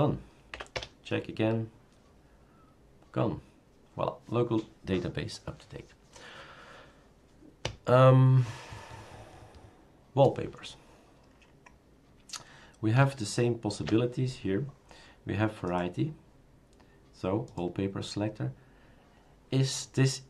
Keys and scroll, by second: 0.5 Up, 0.5 Return.